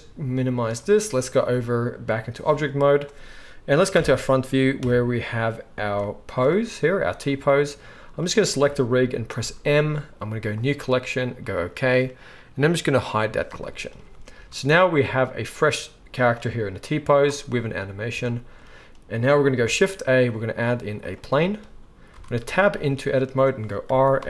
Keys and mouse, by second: 0.0-8.3 drag, 3.9 shift+Left, 4.8 KP_1, 8.3-13.2 middle drag, 9.3 m, 13.2 click, 13.3-16.3 middle drag, 16.3-24.2 drag, 19.6 shift+a, 22.1 Tab, 23.8 r.